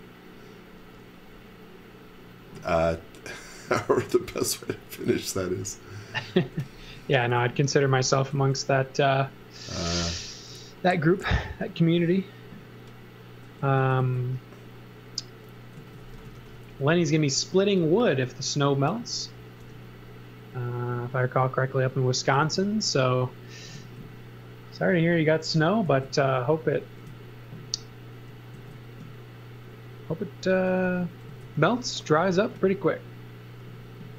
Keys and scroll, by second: 5.4 b, 6.4 space, 6.9 s, 7.6 space, 8.1 s, 10.3 space, 13.6 s, 15.5-16.9 typing, 18.1 space, 19.6 m, 30.5 space, 30.9 s.